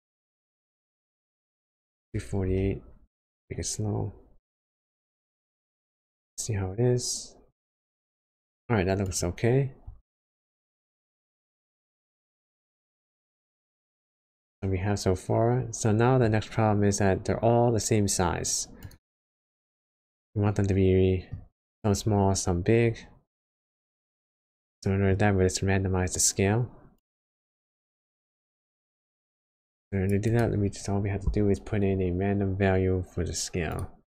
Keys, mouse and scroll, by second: 9.0 click, 9.4-9.9 scroll down 4, 10.2 middle click, 14.3 middle click, 16.4 scroll up 1, 16.9 scroll down 1, 18.8 click, 20.1 middle click, 21.4 scroll up 2, 22.8-23.6 scroll down 5, 24.4 middle click, 27.0 click, 28.5 click, 28.7-29.0 scroll up 1, 30.2 click, 30.7 shift+a.